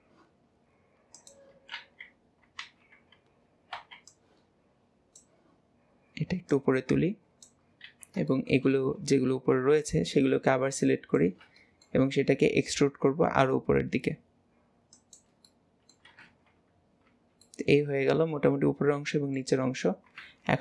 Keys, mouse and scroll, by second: 1.2 click, 1.8 alt+z, 6.5 click, 7.9 alt+a, 8.3-9.5 shift+middle drag, 9.5 b, 11.6 shift+middle click, 12.3 e, 15.5 middle click, 16.3 alt+z, 16.6 scroll down 2, 17.1 Tab, 17.5-20.6 middle drag.